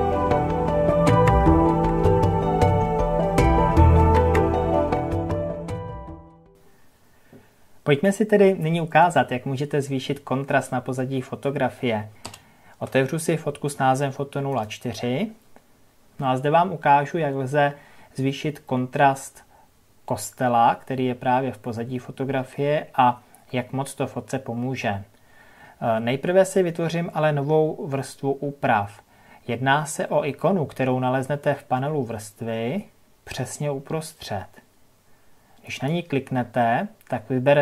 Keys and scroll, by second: 12.1 ctrl+o.